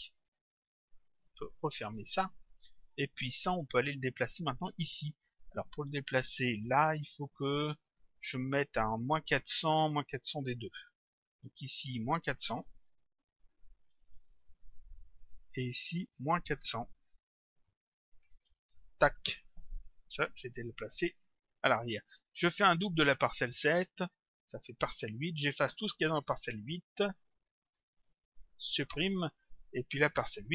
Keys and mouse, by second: 1.2 click, 3.4 click, 7.6 click, 10.8 click, 16.3 click, 18.7 Return, 22.3 click, 23.0 ctrl+click, 25.5 click, 27.7 shift+click, 30.1 click.